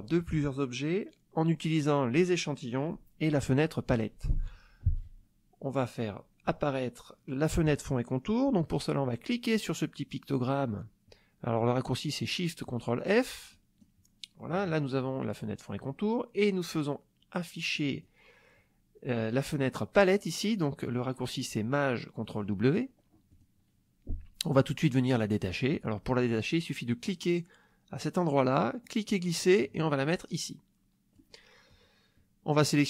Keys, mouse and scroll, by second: 13.5 click, 17.7 click, 23.3 click, 28.8-31.3 drag.